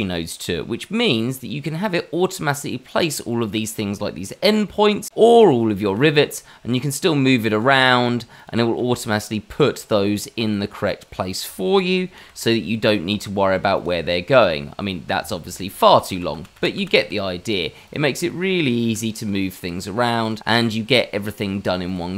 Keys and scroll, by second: 5.7 g, 8.7 g, 12.1 ctrl+t, 15.8 ctrl+z, 16.0 ctrl+z, 16.3 ctrl+z, 16.5 ctrl+z, 16.7 ctrl+z, 18.8 g, 20.9 g.